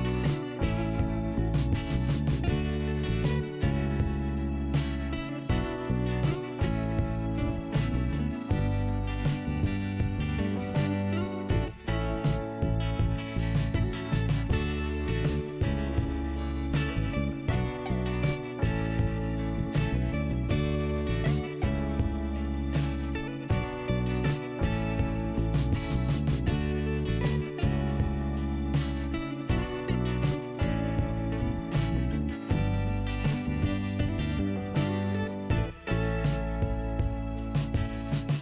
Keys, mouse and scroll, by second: 0.4 click, 0.6 click, 0.7 double click, 0.8 double click, 1.2 click, 1.5 double click, 1.6 double click, 1.7 double click, 2.7 click, 5.1 i, 5.6 scroll down 1, 6.3 scroll up 2, 8.7 click, 9.8 click, 11.4 scroll down 1, 14.1 click, 14.4 click, 17.9 click, 20.2 5, 22.6 scroll up 1, 24.1 click, 26.8 click, 26.9 click, 27.3-27.8 scroll down 1, 28.8 click, 30.2 scroll up 1, 30.8 click, 31.8 click, 33.1 scroll up 1, 37.7-38.2 scroll up 2.